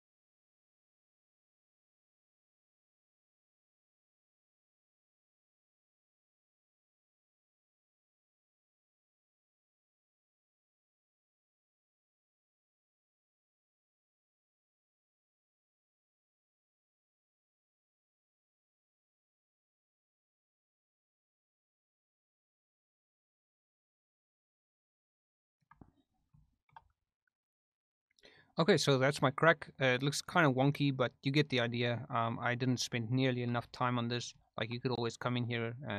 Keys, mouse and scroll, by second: 0.6 ctrl+click, 1.0 ctrl+click, 1.4 ctrl+z, 1.4 f, 1.6 ctrl+click, 1.8 ctrl+click, 2.2 shift+click, 2.4 f, 2.5 ctrl+click, 2.9 ctrl+click, 3.1 shift+f, 3.2 ctrl+click, 3.8 ctrl+click, 4.1 ctrl+click, 4.6 ctrl+click, 5.1 ctrl+click, 5.5 ctrl+click, 5.9 ctrl+click, 6.1 ctrl+click, 6.4 ctrl+click, 6.7 ctrl+z, 6.8 ctrl+click, 7.0 ctrl+click, 7.2 ctrl+click, 7.6 click, 8.0 click, 8.3 f, 8.6 ctrl+click, 8.7 ctrl+click, 8.8 click, 9.0 click, 9.2 click, 9.4 f, 9.6 click, 9.9 ctrl+z, 10.1 ctrl+z, 10.5 click, 10.6 f, 10.9 ctrl+click, 11.4 shift+click, 11.7 ctrl+click, 12.3 f, 12.4 click, 12.6 click, 13.0 click, 13.2 click, 13.4 click, 13.9 click, 14.1 shift+middle click, 14.8 click, 14.9 f, 15.1 ctrl+click, 15.5 shift+middle click, 15.6 ctrl+click, 16.0 ctrl+click, 16.2 shift+middle click, 16.4 ctrl+click, 17.5 ctrl+click, 17.5 shift+middle click, 17.6 shift+click, 17.7 ctrl+click, 17.9 shift+middle click, 18.2 click, 18.4 f, 18.5 click, 18.9 click, 19.1 click, 19.2 shift+click, 19.8 shift+click, 20.2 click, 20.5 click, 20.9 ctrl+click, 21.1 ctrl+click, 21.4 ctrl+f, 21.4 ctrl+click, 21.7 ctrl+click, 21.9 ctrl+click, 22.0 ctrl+click, 22.2 shift+middle click, 22.4 shift+middle click, 22.5 middle click, 23.1 click, 23.4 ctrl+z, 23.5 f, 23.8 click, 23.9 click, 24.1 click, 24.3 click, 24.4 shift+click, 24.9 shift+click, 25.3 f, 25.4 ctrl+click, 26.4 shift+middle click, 29.4 middle click, 33.6 shift+middle click, 34.4 shift+middle click, 35.1 click, 35.4 click, 35.7 click.